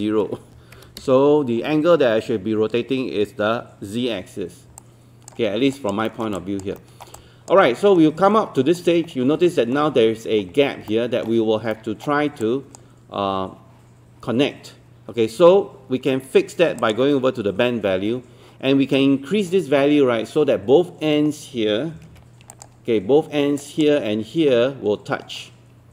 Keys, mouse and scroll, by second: 0.8 KP_0, 4.8 alt+click, 5.5 scroll up 1, 5.7 alt+click, 6.4 alt+click, 6.8 alt+middle click, 7.2 alt+click, 7.6 alt+middle click, 8.3 alt+middle click, 9.1 scroll up 1, 9.5 alt+middle click, 11.7 alt+middle click, 12.4 alt+click, 16.8 click, 22.1 ctrl+1, 22.5-25.9 drag.